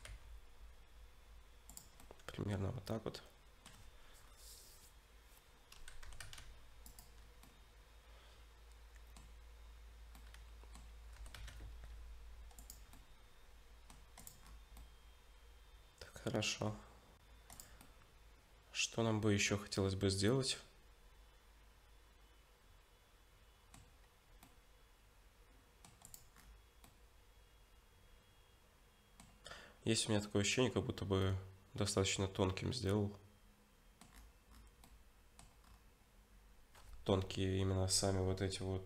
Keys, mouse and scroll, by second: 2.0 middle click, 4.2-5.2 scroll down 2, 5.2-6.0 scroll down 2, 6.0 r, 7.2 scroll up 2, 7.4 middle click, 10.2 middle click, 11.2 g, 12.9 middle click, 14.2 click, 14.4-15.2 scroll down 5, 14.8 middle click, 16.6-17.3 scroll up 2, 17.3 scroll up 2, 17.5 click, 23.9-24.4 scroll up 2, 24.4 middle click, 26.0 click, 26.3-26.9 scroll down 5, 26.8 middle click, 29.4-31.2 scroll up 5, 31.2 middle click, 31.2-31.8 scroll up 1, 34.1-35.2 scroll down 10, 34.8 middle click, 35.6 scroll up 2, 37.6 scroll up 3.